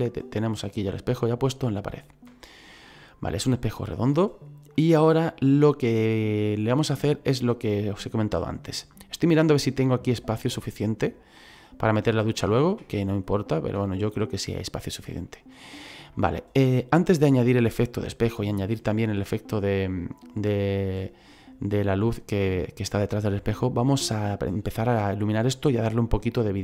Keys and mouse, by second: 0.8 middle click, 2.3 shift+middle click, 7.0 middle click, 12.7 middle click, 13.8 middle click, 15.1 shift+middle click, 25.1 middle click.